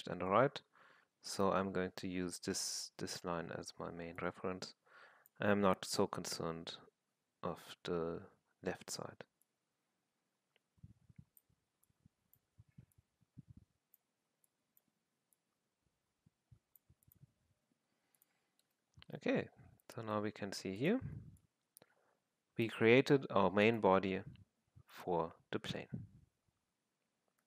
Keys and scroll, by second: 23.4 1, 24.2 1.